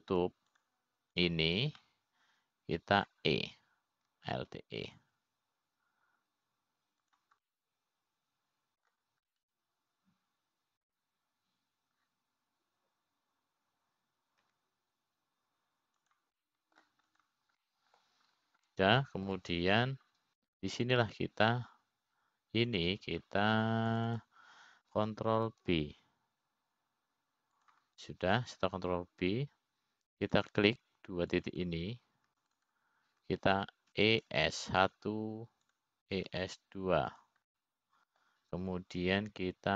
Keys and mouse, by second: 0.6 middle click, 3.1 shift+click, 3.8 shift+click, 4.4-5.7 middle drag, 6.9 alt+e, 10.0-11.5 middle drag, 11.9-13.5 middle drag, 17.1 e, 18.9 middle click, 19.7 click, 20.2 middle click, 21.2 middle click, 23.4 click, 25.4 click, 26.5 click, 26.9 click, 28.3 ctrl+b, 32.9 click, 34.0 click, 34.3 click, 35.0 shift+click, 35.3 shift+click, 36.6 e, 38.8 e.